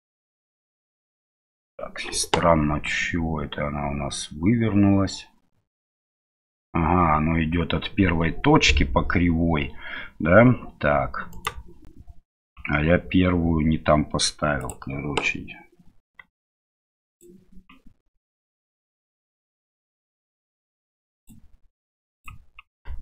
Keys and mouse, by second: 11.3 right click, 17.0 click, 21.2 click.